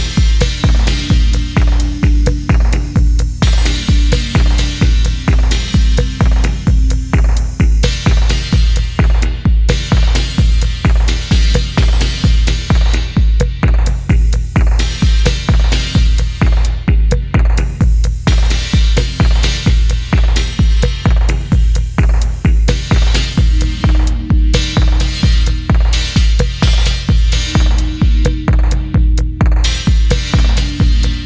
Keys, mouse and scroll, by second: 1.0 r, 2.5-2.9 scroll up 1, 2.9 middle click, 3.7 e, 5.1 middle click, 5.4-5.9 scroll down 1, 5.9 middle click, 7.8 t, 9.8 scroll down 1, 10.0 middle click, 13.7 middle click, 14.8 scroll down 1, 15.1 middle click, 15.9 middle click, 16.8 shift+middle click, 24.3 middle click, 25.1-25.5 scroll up 1, 25.5-25.8 scroll down 1, 25.8 middle click, 26.4-26.8 scroll up 1, 26.8 middle click, 28.1-29.0 scroll down 1, 29.0 middle click.